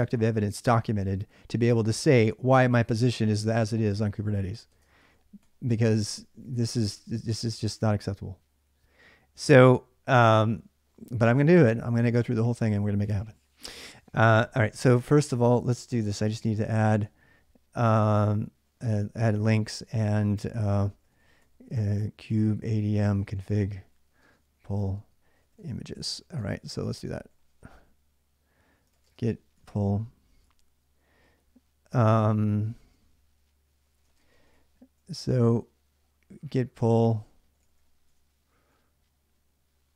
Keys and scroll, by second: 4.5-6.3 typing, 16.0-17.1 typing, 18.3-35.2 typing, 37.1-38.7 typing.